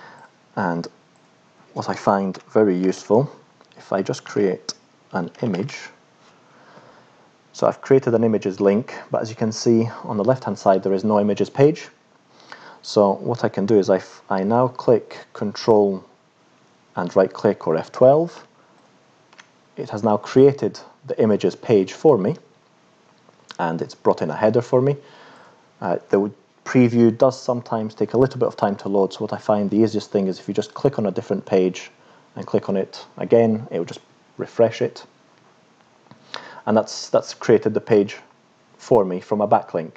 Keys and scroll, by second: 2.3 Return, 2.8 [, 4.0-6.2 typing.